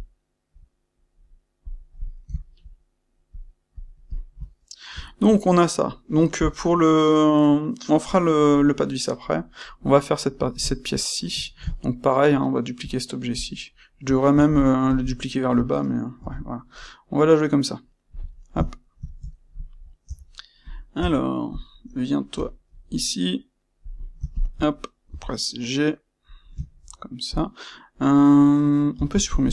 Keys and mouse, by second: 1.6 click, 2.1-3.2 ctrl+middle drag, 3.2 click, 3.7 click, 4.5-13.3 shift+middle drag, 13.3 click, 14.2 shift+d, 14.9 shift+click, 15.0-18.1 shift+middle drag, 16.1 g, 18.1 click, 18.2-20.6 ctrl+middle drag, 20.0 Tab, 20.6 click, 20.9 Tab, 21.4 click, 22.3 g, 24.2 shift+click, 25.0 g, 26.2 click, 26.6 ctrl+middle click, 27.2 click, 28.9 x.